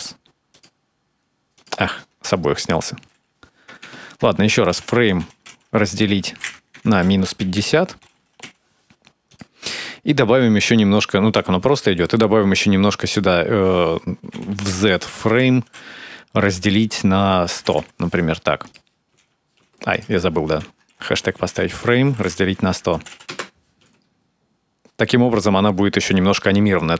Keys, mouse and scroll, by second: 1.4 click, 10.1 space, 11.8 space, 12.8 click, 17.6 0, 18.9 space, 19.4 space, 19.7 click, 23.1 0, 23.6 space.